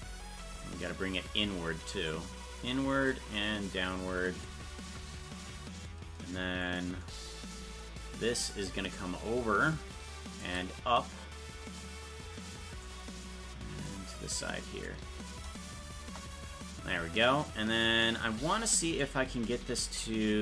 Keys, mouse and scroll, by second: 2.1 shift+click, 3.6 click, 6.7 right click, 8.5-10.5 shift+drag, 11.8-12.9 drag, 13.8-14.9 drag, 16.1 KP_0, 19.0 shift+right click.